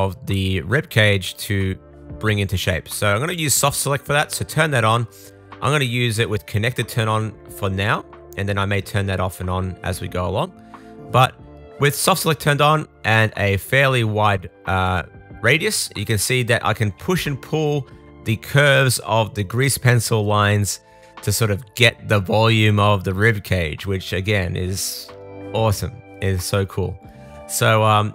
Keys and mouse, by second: 1.5 super+l, 3.9-8.9 drag, 8.9-13.6 middle drag, 14.3-17.0 middle drag, 23.6 middle click.